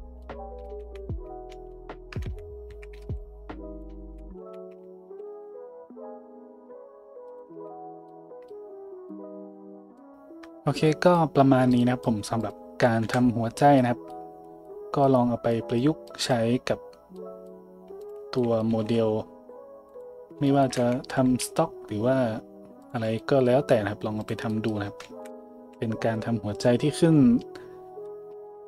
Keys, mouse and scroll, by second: 0.8-3.0 typing, 3.8-5.0 middle drag, 4.1 z, 4.4 `, 5.0 s, 7.5 Tab, 12.4 click, 13.0 KP_Decimal, 18.0 click, 18.1-24.2 middle drag, 18.7 g, 20.8 `, 21.4 g, 23.0 a, 24.2 click, 24.2-28.6 middle drag, 25.6 a.